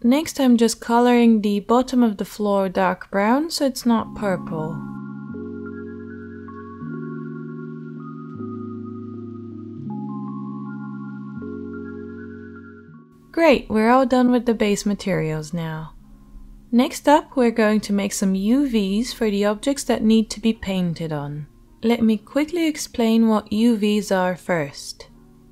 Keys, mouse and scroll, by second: 0.4-5.1 middle drag, 3.7 h, 5.1-5.7 drag, 5.7-6.6 middle drag, 6.2 Tab, 6.6 click, 6.9 middle click, 7.0 3, 7.7 click, 8.0 middle click, 8.7-11.3 drag, 10.6 Tab, 11.3-12.3 middle drag, 11.9 alt+h, 12.3 click, 12.4-25.5 middle drag.